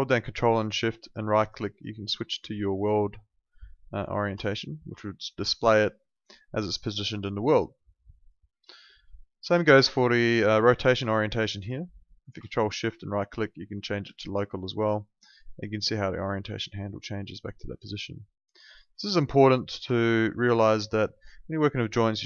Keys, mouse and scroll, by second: 0.6 ctrl+shift+right click, 5.0 alt+click, 8.9 e, 9.6 alt+click, 12.8 ctrl+shift+right click, 15.0 alt+click, 18.8 w, 19.5 alt+click, 20.1 ctrl+shift+right click.